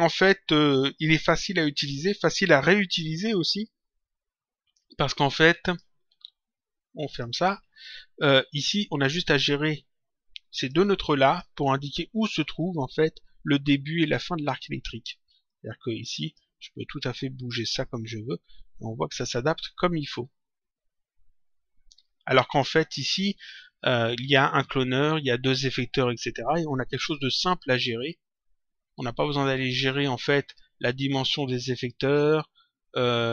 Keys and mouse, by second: 5.6 click, 7.0 click, 8.8 click, 10.5 click, 15.4 click, 17.1 click, 28.0 click.